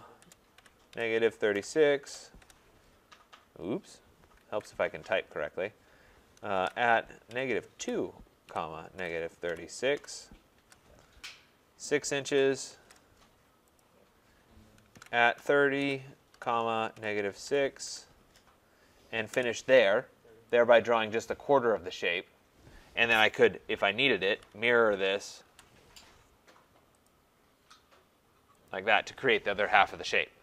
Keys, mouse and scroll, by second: 0.0-2.5 typing, 4.6 ctrl+z, 6.3-7.8 typing, 9.0-10.6 typing, 12.3-13.3 typing, 13.9-17.5 drag, 14.7-17.9 typing, 19.3 Return, 20.8 click, 24.3-24.8 typing, 25.5 Return, 27.1 click, 28.7 click.